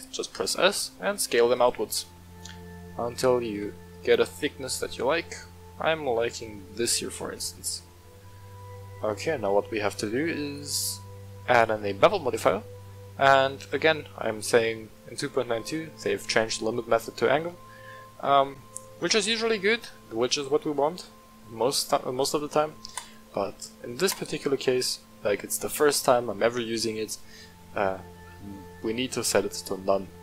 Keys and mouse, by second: 0.2 s, 1.5 click, 2.1-3.1 middle drag, 3.4 s, 3.9 click, 4.0 Tab, 4.3-6.8 middle drag, 7.6-7.9 shift+middle drag, 8.6-9.7 middle drag, 10.4-11.5 drag, 12.1-12.6 middle drag, 23.1 click, 25.0-25.5 middle drag.